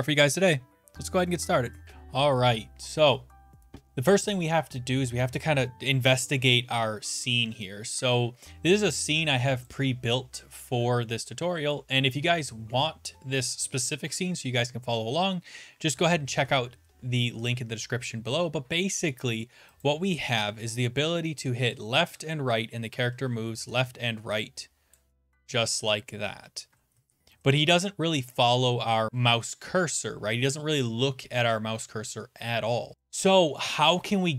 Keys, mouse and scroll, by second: 0.3 Up, 20.0 click, 21.7 Left, 22.1-22.9 Right, 22.1 click, 23.1 Left, 25.0 click, 25.2 Left, 25.5 Down, 25.7 Right, 26.4-26.9 Left, 26.9 Down, 27.3 Right, 28.3-29.3 drag.